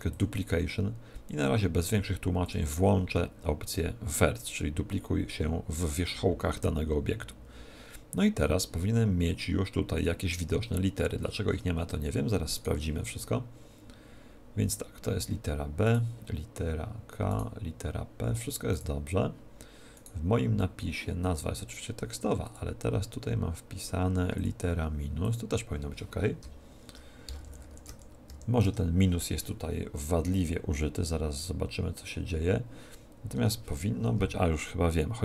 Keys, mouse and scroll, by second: 0.1-1.7 drag, 2.4-4.1 drag, 10.4-14.1 middle drag, 12.5 right click, 15.8-21.8 right drag, 22.4-26.3 drag, 33.3 Tab.